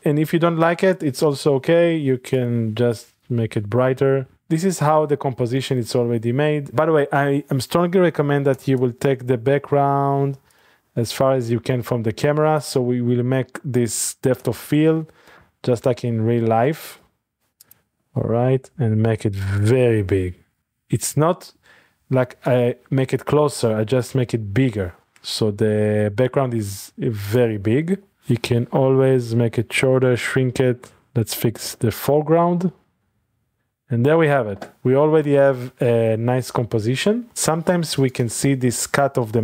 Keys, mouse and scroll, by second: 0.5 click, 1.8 click, 2.5 click, 5.0 middle click, 5.6 shift+middle click, 6.0 middle click, 6.4 middle click, 6.7-8.5 scroll down 1, 8.5 typing, 10.5-11.4 drag, 10.8-11.4 scroll down 1, 11.8 shift+middle click, 12.0-13.4 scroll down 2, 12.4 shift+middle click, 13.6-15.1 middle drag, 14.4 y, 15.4 middle click, 15.4 y, 16.6 middle click, 16.6 g, 17.0 y, 17.6 click, 18.5-20.3 middle drag, 18.7 s, 20.6 drag, 22.2 typing, 27.2 click, 27.8-28.7 typing, 31.0 typing, 33.0 click, 33.2 g, 33.6 click, 34.1-35.2 middle drag, 36.2-37.2 scroll up 2, 37.2 scroll up 1, 38.1 click.